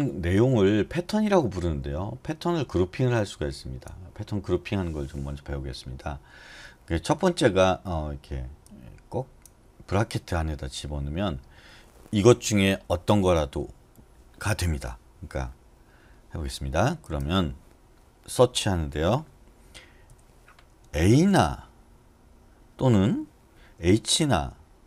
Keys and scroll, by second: 18.4 /, 20.1-21.5 typing, 23.9 h.